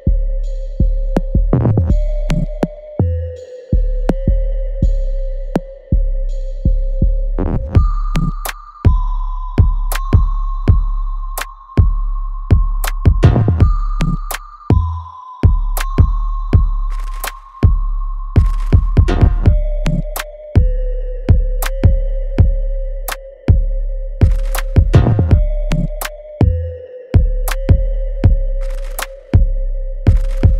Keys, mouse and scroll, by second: 1.4 click, 2.6 alt+right click, 3.2 alt+click, 3.9 alt+middle click, 4.2 alt+right click, 5.5 click, 6.7-8.1 ctrl+drag, 8.1 alt+click, 8.5 alt+middle click, 9.2 alt+right click, 9.9 alt+middle click, 10.3 alt+right click, 11.2-14.2 ctrl+drag, 14.2 ctrl+z, 15.3-17.3 ctrl+drag, 17.3-20.4 ctrl+drag, 20.4 alt+click, 21.0 alt+middle click, 21.5 alt+right click, 22.5 alt+right click, 22.9 alt+click, 24.3-27.0 ctrl+drag, 27.0-30.5 ctrl+drag.